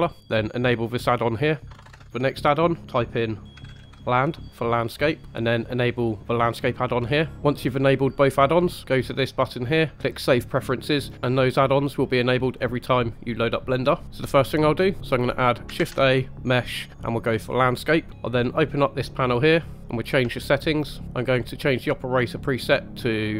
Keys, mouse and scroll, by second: 14.0 shift+middle click, 15.7 shift+a, 19.3 click, 19.8-20.3 scroll up 4, 20.3-20.8 shift+middle drag, 21.5-22.4 drag.